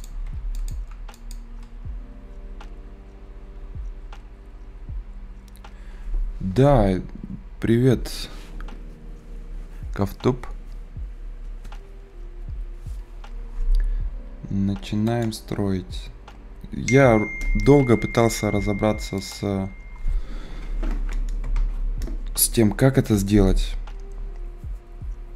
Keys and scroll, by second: 0.1 Escape.